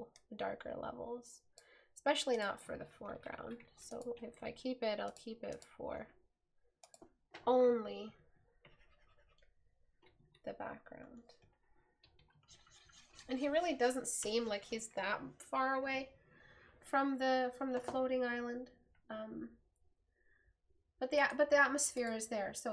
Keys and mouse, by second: 10.5 right click.